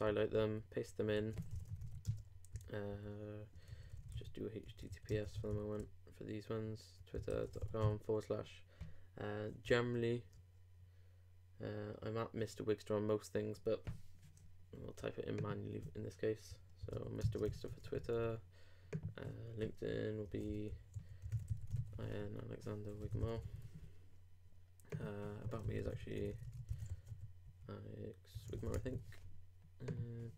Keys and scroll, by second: 0.3 super+Left, 0.4 super+v, 1.2 super+z, 1.5 super+h, 2.0 shift+p, 2.5 shift+/, 5.1 shift+s, 5.3 shift+/, 7.1 super+., 16.6-17.9 typing.